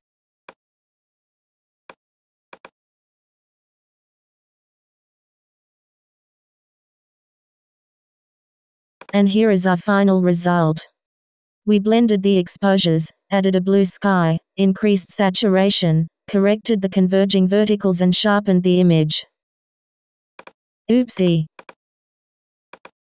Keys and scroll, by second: 3.3 Right, 4.5 Right, 5.6 Left, 7.2 Left.